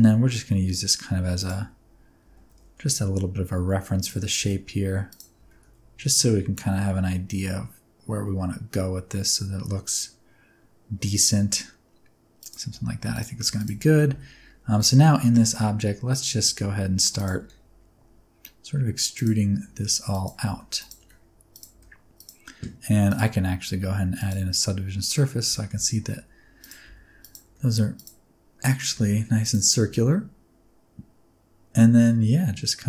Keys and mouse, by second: 1.3 click, 1.5 Tab, 2.2 g, 2.4 z, 3.9 click, 4.3 s, 5.0 click, 5.3 g, 5.5 z, 12.3 click, 12.6 Tab, 13.4 Tab, 14.0 Tab, 15.1 click, 16.4 r, 17.1 click, 17.3 g, 19.1 click, 19.6 e, 20.0 click, 20.7 click, 20.7 g, 20.9 r, 21.4 click, 21.7 g, 22.1 click, 23.1-24.2 drag, 25.5 shift+middle click, 26.0 e, 26.5 click, 26.8 g, 27.1 click, 27.4 r, 27.9 click, 28.8 e, 29.3 click, 29.8 g.